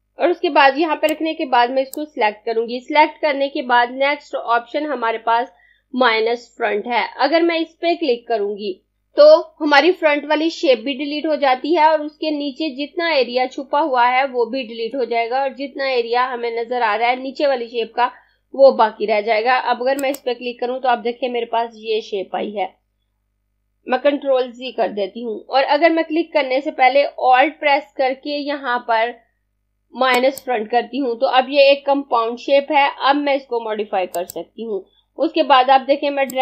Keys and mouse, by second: 19.7 click, 24.5 z, 26.8 alt+Num_Lock, 29.6 alt+click, 33.5 click.